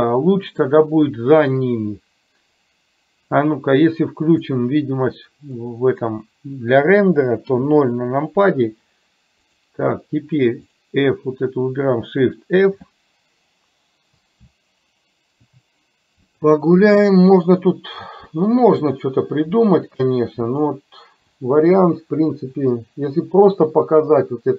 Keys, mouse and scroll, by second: 5.6-6.2 middle drag, 7.6 KP_0, 12.7 shift+f.